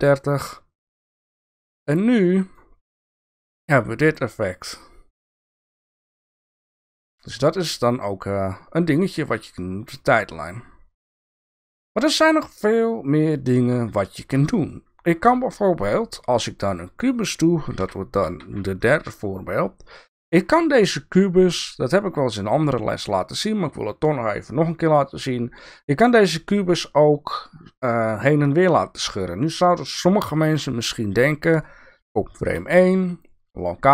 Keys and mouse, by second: 0.5-2.6 drag, 3.7 click, 7.2 click, 9.7-11.2 drag, 13.5 shift+drag, 14.4 shift+click, 15.0 shift+a, 17.8 g, 32.5 i.